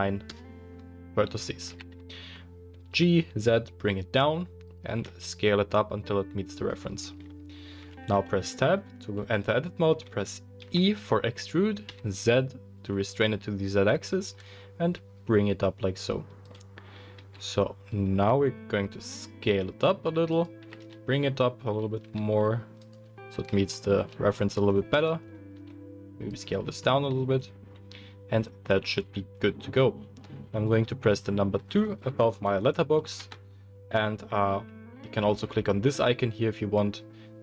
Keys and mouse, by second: 1.6 g, 4.8-24.9 middle drag, 7.0 Tab, 7.0 s, 10.6 e, 17.1 s, 20.7 g, 24.9 alt+click, 25.1-26.6 alt+middle drag, 25.5 s, 33.1 2.